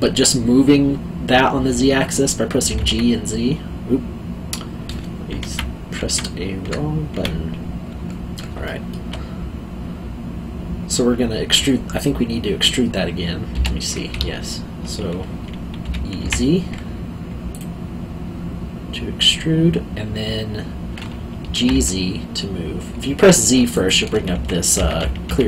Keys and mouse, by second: 2.7 h, 2.7 z, 5.4 ctrl+z, 7.1 z, 8.6 alt+middle click, 13.5 g, 14.1 Escape, 15.8 e, 16.1 z, 17.5 click, 21.4 g, 21.7 z, 23.7 click, 24.3 z.